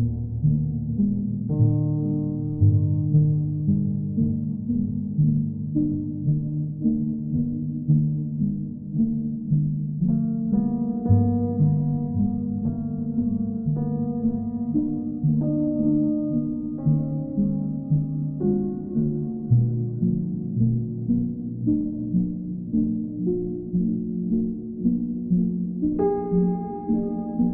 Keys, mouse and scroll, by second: 0.0 shift+click, 1.9 click, 5.7 click, 6.4 ctrl+click, 7.0 shift+click, 8.3 shift+click, 9.2 ctrl+click, 9.6 ctrl+z, 10.8 alt+click, 13.9 click, 14.3 shift+click, 18.1 ctrl+click, 20.2 ctrl+click, 20.9 click, 21.6 shift+click, 23.6 click, 25.3 click, 26.3 click.